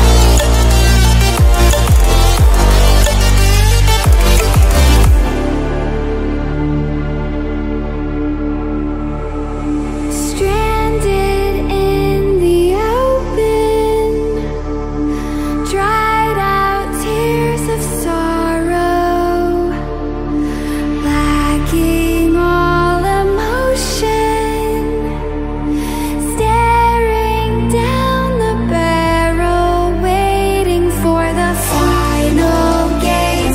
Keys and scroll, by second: 3.4 ctrl+e, 21.0 ctrl+i, 27.3-27.6 typing, 28.5 Return.